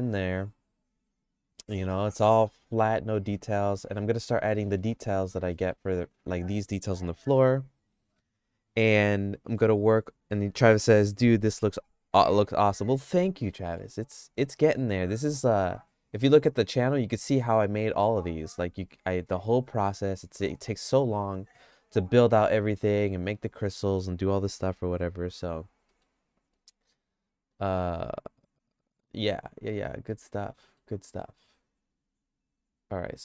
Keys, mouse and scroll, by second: 3.7 middle click, 4.2-5.7 shift+middle drag, 13.0 middle click, 13.4 shift+middle click, 16.4 click, 17.5 middle click, 22.5 middle click, 23.0 middle click, 25.9 middle click, 26.5 middle click, 27.0 middle click, 27.6 middle click, 29.7 middle click, 30.1 middle click, 30.6 middle click, 32.9 click.